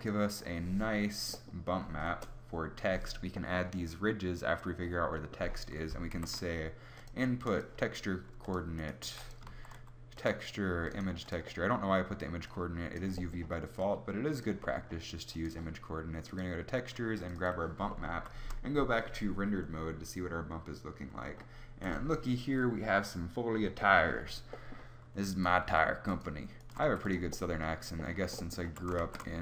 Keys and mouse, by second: 2.0 KP_0, 2.2 KP_0, 6.0 shift+a, 8.9 g, 9.5 shift+a, 18.5 shift+z, 25.6 g, 26.7 g, 28.6 a.